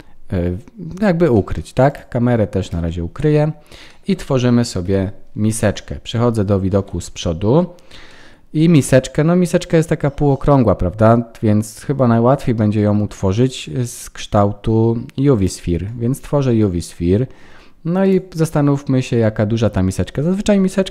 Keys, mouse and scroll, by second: 0.4-0.7 scroll down 3, 1.3 shift+middle click, 1.8 click, 2.7 h, 3.8 shift+middle click, 4.8 KP_1, 6.8 ctrl+s, 7.2-7.9 scroll up 4, 8.1 shift+middle click, 13.2 shift+a, 16.0-17.9 scroll down 10, 18.0 click, 18.1 click.